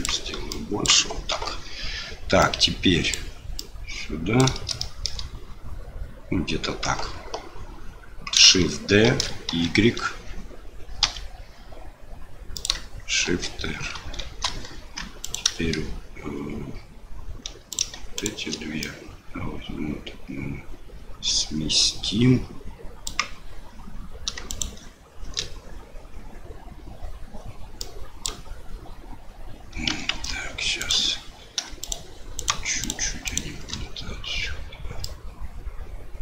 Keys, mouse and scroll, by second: 0.5 click, 1.3 KP_7, 2.5 click, 3.6-4.7 drag, 4.8 shift+middle click, 9.0 shift+d, 13.2 shift+r, 13.9 shift+r, 15.2 click, 17.7 click, 18.1 shift+click, 18.8-23.1 drag, 27.8-29.9 drag, 30.1 ctrl+z, 30.8 click, 31.8 shift+click, 32.4 shift+click, 32.8 shift+click, 33.2 shift+click, 35.1-36.2 drag.